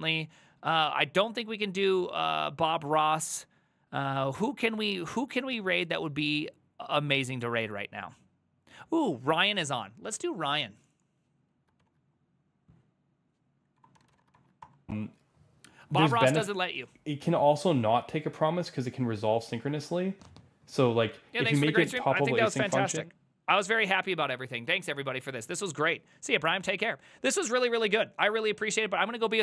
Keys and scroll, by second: 11.9 ctrl+c, 13.6-14.7 typing.